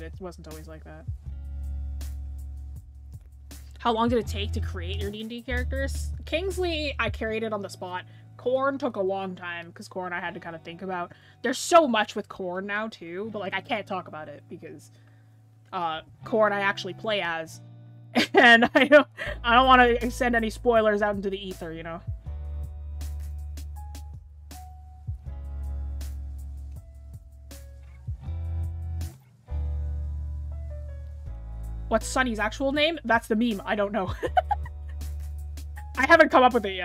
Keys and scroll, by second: 16.9 scroll up 1, 17.7 scroll up 1.